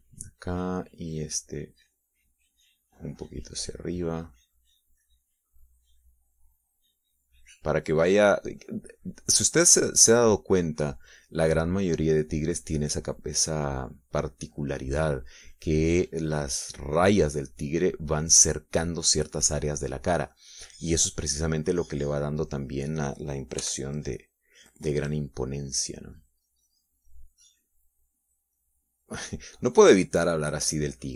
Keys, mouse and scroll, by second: 1.7 middle click, 2.8-8.5 drag, 8.8 middle click, 10.4 middle click, 11.1-12.1 drag, 12.2-16.3 drag, 16.4 middle click, 17.4-19.1 drag, 19.1 middle click, 20.0 scroll up 1, 20.1 middle click, 25.2 f, 25.7 click, 26.4-28.2 drag, 28.7-30.5 drag.